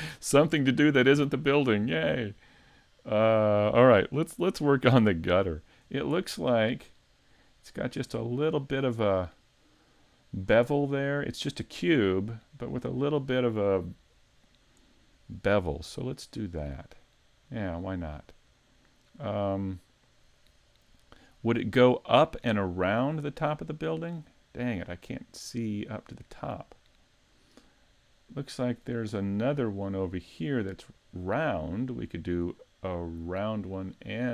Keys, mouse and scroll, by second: 4.8 middle click, 5.8-6.2 scroll up 4, 6.2 middle click, 7.0-8.0 scroll up 2, 7.4 middle click, 15.5-16.6 scroll down 1, 16.6-17.6 scroll down 6, 17.6 middle click, 18.9 middle click, 20.6-21.4 scroll up 1, 21.4 shift+middle click, 22.2 middle click, 23.4 shift+middle click, 25.1 middle click, 27.5-28.2 scroll up 3, 28.2 middle click, 29.2 middle click, 29.8-30.8 scroll up 1, 30.8 scroll up 1, 31.4-32.3 scroll down 3, 32.3 middle click, 33.2 middle click, 33.9-34.3 scroll down 2.